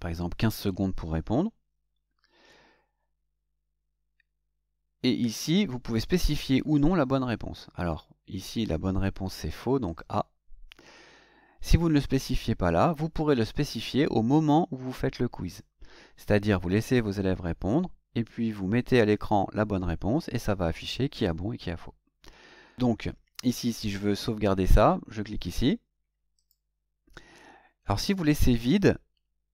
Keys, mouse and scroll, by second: 9.9 click, 26.3 click.